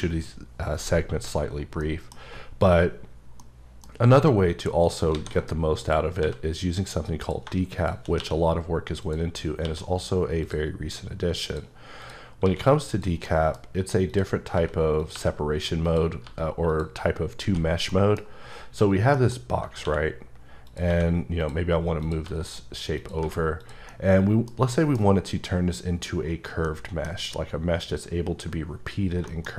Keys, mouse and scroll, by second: 3.4 middle click, 4.8 shift+right click, 5.1 shift+a, 5.8 click, 6.2 s, 7.2 click, 8.2 q, 9.1 click, 9.6 q, 10.4 click, 11.0 scroll up 4, 11.5 click, 12.0 click, 12.4 q, 12.9 click, 13.3 middle click, 14.1 click, 14.5 s, 15.0 click, 15.1 g, 15.8 click, 16.2 g, 16.7 click, 17.5 h, 17.9 middle click, 19.2 middle click, 19.9 q, 20.7 click, 20.9 q, 21.4 click, 22.0 click, 22.2 g, 23.0 click, 23.2 h, 23.6 click, 23.9 middle click, 24.7 middle click, 26.2 scroll down 3, 26.7 middle click, 27.1 scroll down 1, 29.0 scroll down 2, 29.3 shift+middle click.